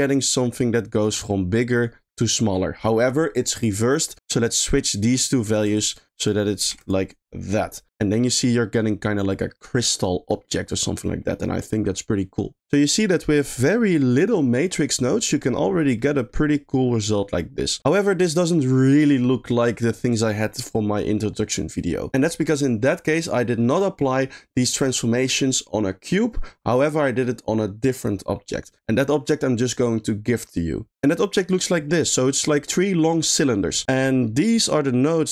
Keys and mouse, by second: 5.5 click, 6.1 click, 7.8 middle click, 8.4 middle click, 9.3 middle click, 10.4 middle click, 11.0 middle click, 12.8 middle click, 16.0 middle click, 17.9 middle click, 23.3 middle click, 24.1 middle click, 28.8 middle click, 31.3 middle click, 34.2 middle click.